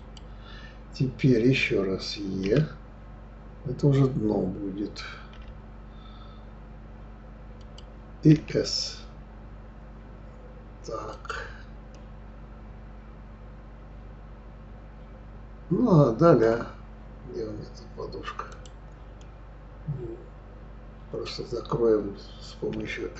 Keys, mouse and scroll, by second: 2.4 e, 8.3 s, 11.9-14.9 middle drag, 18.5 click, 19.2-22.2 middle drag.